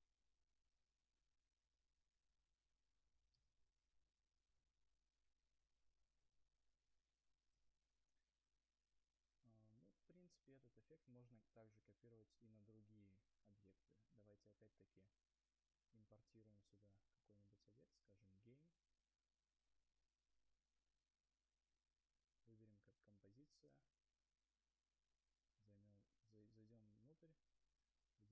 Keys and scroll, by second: 6.0 space, 10.1 u.